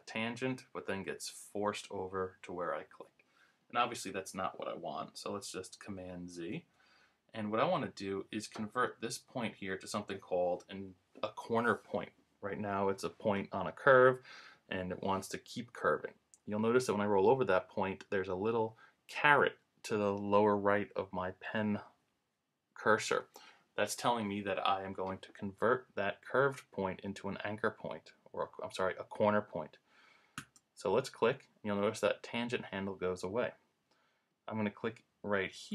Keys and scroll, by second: 6.5 super+z.